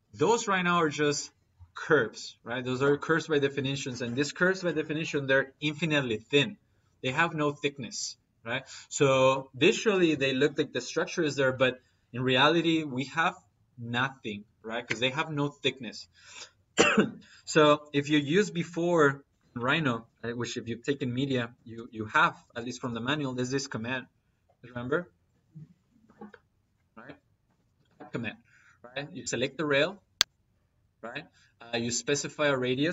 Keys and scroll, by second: 19.1 Escape, 21.6 p, 21.9 i, 22.3 p, 22.6 i, 24.5 Down, 27.3 space.